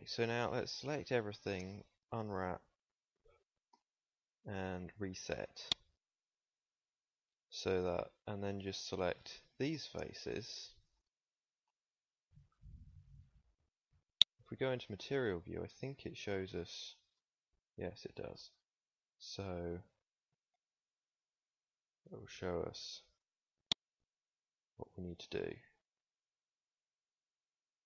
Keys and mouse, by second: 0.0 a, 0.1 a, 2.1 u, 3.6 u, 9.2 middle click, 13.5 ctrl+s, 16.8 middle click, 19.4 s, 24.8 s.